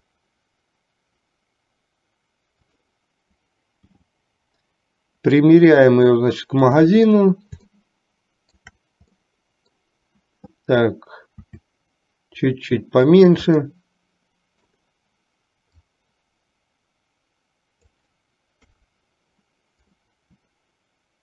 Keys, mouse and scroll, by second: 0.0 s, 4.0 g, 8.0-8.9 shift+middle drag, 9.4 middle click, 11.6 s, 13.9-15.0 middle drag, 16.1-18.1 drag, 18.9 KP_3.